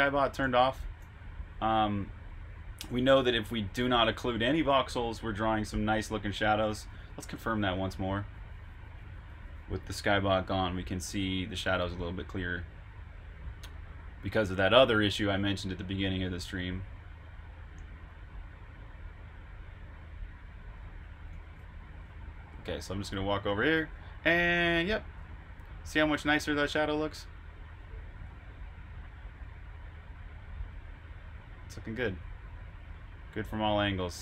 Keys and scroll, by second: 0.1-0.9 typing, 2.3-3.9 typing, 6.2-8.4 typing, 21.0-23.2 typing, 28.1 typing, 34.0 typing.